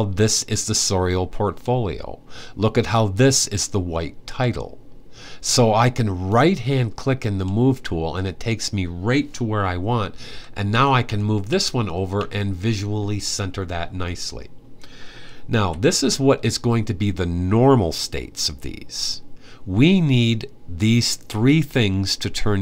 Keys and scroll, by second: 10.0 Right, 10.4-11.9 typing, 15.3 Left.